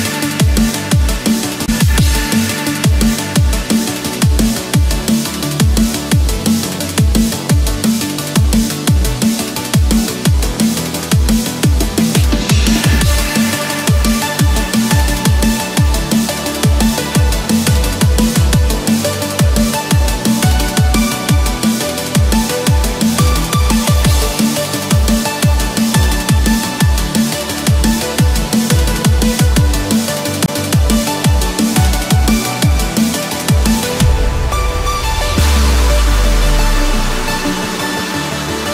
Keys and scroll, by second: 9.3 ctrl+=, 9.4 ctrl+space, 9.7 ctrl+=, 11.3 ctrl+z, 16.4 ctrl+z, 23.8 ctrl+-, 24.1 ctrl+0, 25.3 ctrl+z, 27.0 ctrl+=, 27.2 ctrl+space, 27.5 ctrl+=, 28.2 ctrl+=, 30.3 ctrl+z.